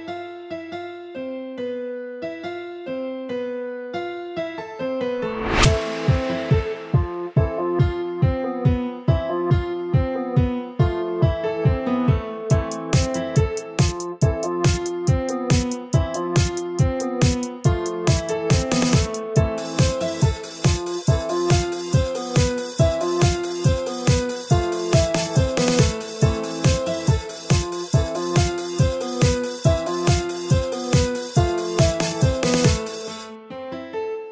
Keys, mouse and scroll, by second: 0.2 click, 0.7 shift+click, 1.2 shift+click, 2.2 shift+click, 2.9 KP_1, 3.8 scroll up 1, 4.4 g, 6.5 a, 6.8 a, 6.9-7.4 scroll down 5, 7.4-8.4 middle drag, 8.4-8.9 scroll up 3, 9.5-10.5 middle drag, 10.5-11.0 scroll down 1, 11.0 a, 11.2 a, 11.6-17.4 middle drag, 18.4 shift+a, 20.4 scroll down 1, 21.3 ctrl+3, 23.7 KP_1, 24.3 g, 27.4-29.1 shift+middle drag, 29.1 Tab, 29.4 3, 29.6 click, 30.0 s, 32.2 middle click, 33.0 Tab, 34.0-34.3 scroll up 2.